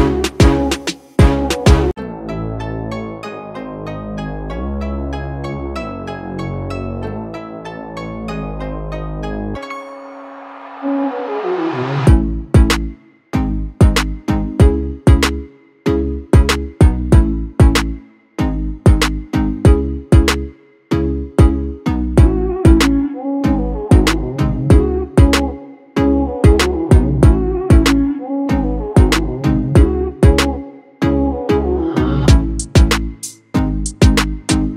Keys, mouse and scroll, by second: 13.3-22.1 alt+drag, 22.1-29.6 alt+drag.